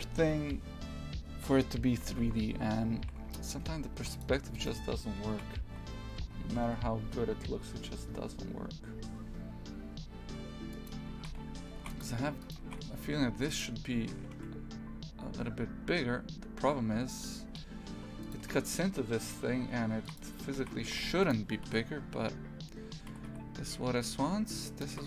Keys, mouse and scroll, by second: 1.9 shift+f, 4.6 right click, 5.3 shift+f, 11.2 shift+f, 12.4 right click, 12.7 shift+f, 14.0 s, 20.0 shift+f, 20.6 shift+f, 21.7 KP_3, 23.2 g.